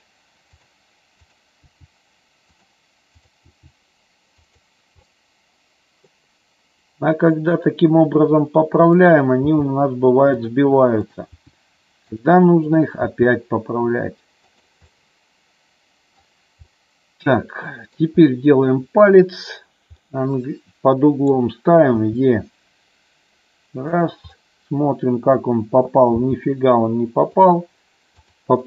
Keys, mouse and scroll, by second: 1.4 click, 1.8 g, 3.3 click, 3.6 g, 4.6 click, 5.1-6.2 middle drag, 9.2 click, 9.7 g, 10.5 click, 11.3 click, 11.5 g, 12.3 click, 12.8 click, 13.3 g, 14.6 click, 15.0-16.4 middle drag, 16.9-18.2 middle drag, 20.3-21.6 middle drag, 22.1 e, 24.1 click, 24.5 middle click, 26.3 g, 27.5 click, 28.5 click.